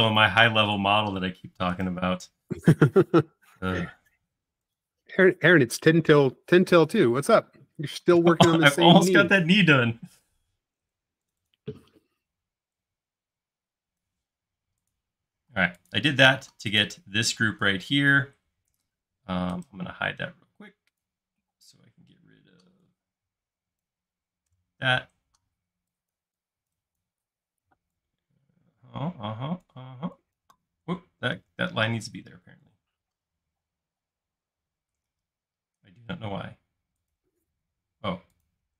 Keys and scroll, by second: 10.8 super+x, 15.6 space, 24.6 BackSpace, 25.5 e, 31.4 super+z, 31.9 space, 35.7 |, 38.1 space.